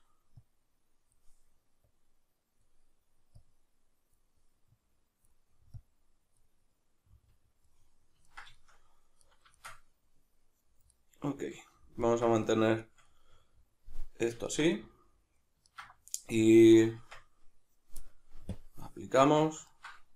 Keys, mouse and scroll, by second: 6.7-18.5 middle drag, 17.0 Tab, 18.5-19.7 drag, 19.2 Tab, 19.7-20.1 ctrl+middle drag.